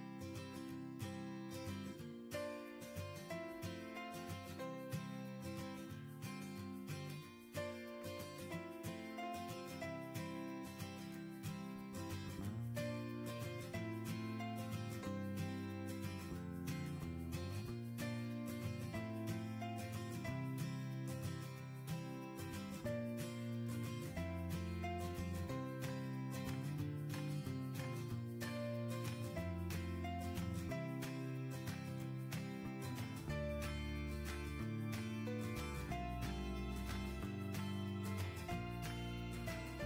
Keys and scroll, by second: 2.1 Right, 4.8 Tab.